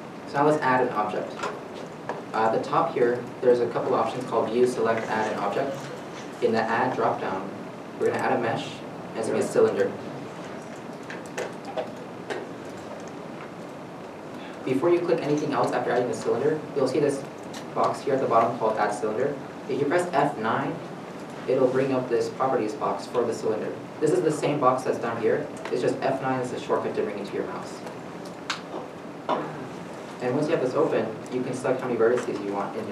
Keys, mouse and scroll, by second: 20.8 F9, 27.0 F9.